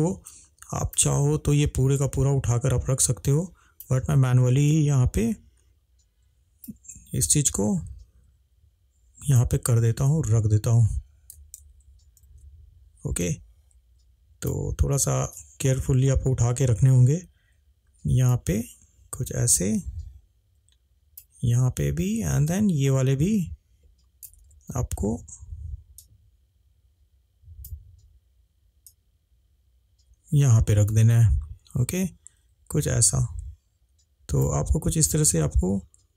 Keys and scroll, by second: 11.7 ctrl+z, 12.2 ctrl+z, 24.4 ctrl+z.